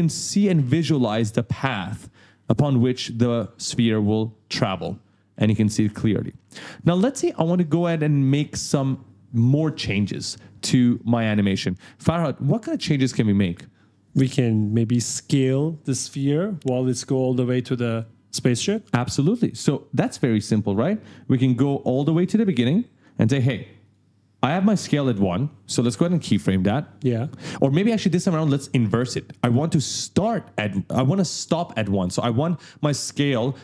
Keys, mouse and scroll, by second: 1.6 right click, 2.5-7.3 typing, 8.0 right click, 8.1 right click, 17.8-18.6 typing, 17.9 right click, 20.7 click, 22.9 click, 23.8 click.